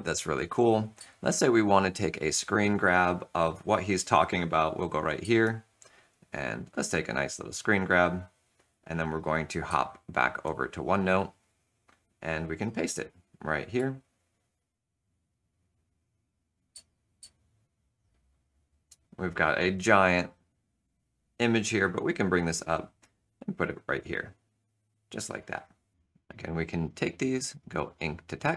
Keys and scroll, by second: 0.9 super+Tab, 2.2 super+Tab, 5.1 shift+super+s, 9.7 super+Tab, 10.9 super+Tab, 13.7 ctrl+v, 14.1 shift+super+s.